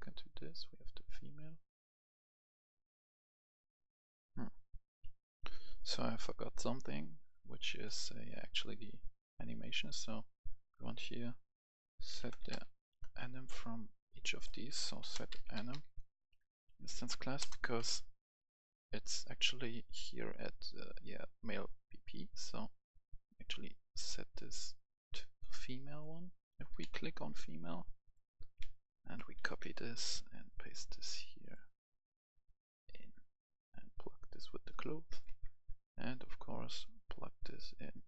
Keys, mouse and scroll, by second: 4.8 right click, 5.1 F10, 5.7 right click, 9.7-11.5 drag, 11.8-12.5 typing, 12.8 Escape, 13.8 click, 14.6-16.1 typing, 16.5 Down, 16.6 Down, 17.3 Return, 18.2 click, 26.5-27.0 typing, 28.5 ctrl+c, 28.8 click, 29.1 ctrl+c, 29.3 click, 30.4-33.5 drag, 34.6 right click, 35.0-38.0 drag.